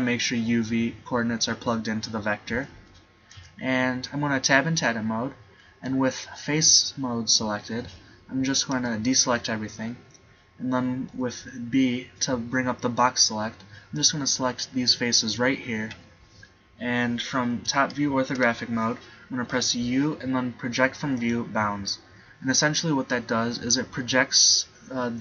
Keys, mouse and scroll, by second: 2.8 z, 3.4 Tab, 5.6 middle click, 7.9 z, 8.8 a, 11.2 b, 17.7 KP_7, 18.4 KP_5, 19.6 u.